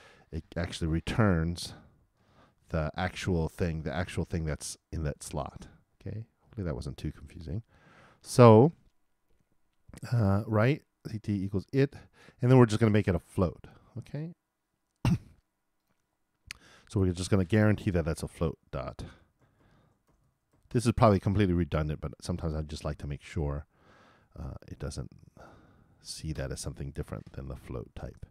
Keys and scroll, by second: 19.7-20.7 typing.